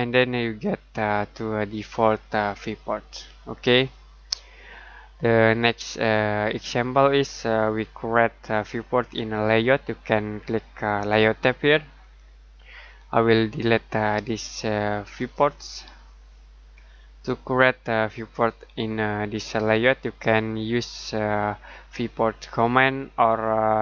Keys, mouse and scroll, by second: 2.2 middle click, 12.0 click, 15.1 click, 16.6 Delete.